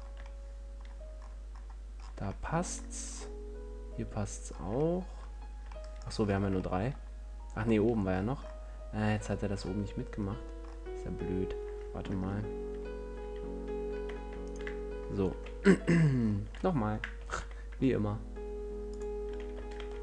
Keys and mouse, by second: 0.0 click, 0.3 middle click, 4.8 middle click, 6.3 middle click, 10.9-13.0 middle drag, 13.0 ctrl+z, 15.6 ctrl+l, 17.5 g, 19.3 click, 19.8 g.